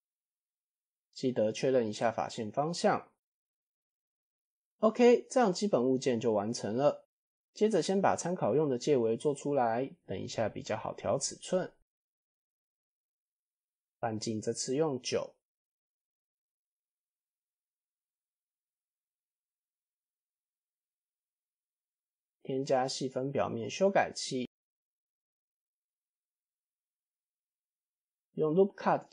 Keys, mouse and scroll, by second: 0.5 f, 0.7 middle click, 0.9 a, 2.1 shift+n, 3.2 middle drag, 3.4-3.8 scroll down 1, 3.8 KP_1, 4.3 Tab, 4.9-5.2 middle drag, 7.1 KP_1, 8.3 shift+a, 12.1-13.2 drag, 13.8-15.4 drag, 16.4-17.6 drag, 18.8-19.7 drag, 22.2 ctrl+5, 24.2-25.0 middle drag, 26.0 Tab, 27.8 ctrl+r.